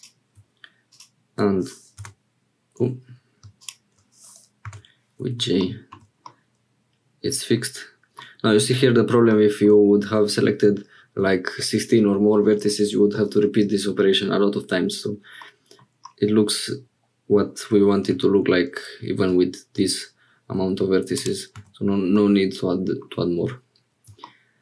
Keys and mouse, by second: 0.9 click, 2.0 j, 4.6 j, 5.6 click, 5.9 Tab, 6.2-8.2 drag, 12.6 Tab, 15.4 click, 19.2 e, 21.6 Tab, 22.1 click.